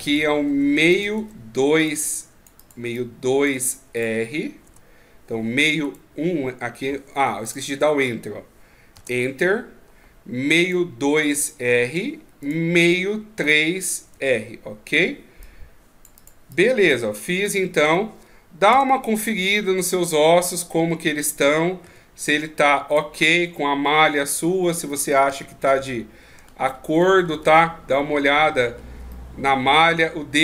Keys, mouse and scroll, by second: 0.0 right click, 0.9 click, 5.8 right click, 7.4 click, 10.6 right click, 12.4 right click, 13.4 click, 19.4 middle click, 21.3 middle click, 21.8 Tab, 22.9 right click, 23.2 Tab, 23.5 middle click, 25.3 KP_1, 26.4-27.6 ctrl+scroll up 19, 28.4-29.1 scroll up 5, 29.1 middle click.